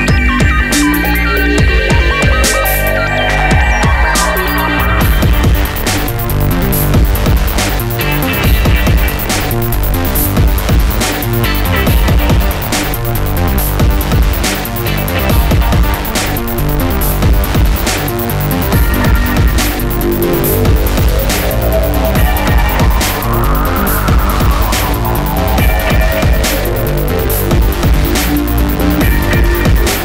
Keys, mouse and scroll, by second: 0.3 scroll down 1, 0.9 scroll down 1, 2.6 middle click, 3.0 middle click, 3.3 middle click, 3.8 scroll up 1, 4.8 scroll up 1, 7.4 click, 7.8 click, 11.0 middle click, 11.7 middle click, 12.9 middle click, 13.2 middle click, 15.0 shift+click, 16.4 ctrl+z, 18.5 middle click, 18.9 middle click, 19.8 middle click, 20.7 ctrl+click, 21.0 middle click, 21.7 middle click, 22.5 ctrl+click, 23.0 middle click, 23.6 middle click, 24.2 middle click, 24.7 middle click, 25.4 middle click, 26.5 ctrl+click, 27.0 middle click, 27.4 middle click, 27.8 middle click, 28.5 middle click.